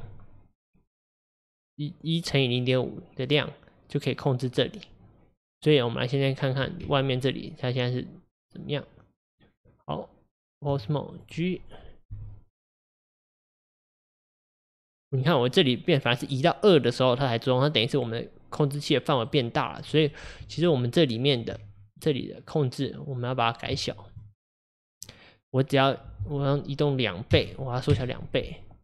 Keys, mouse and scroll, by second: 5.7 click, 11.2 click, 12.2 g, 21.6 Tab, 22.0 click, 27.9-28.8 drag.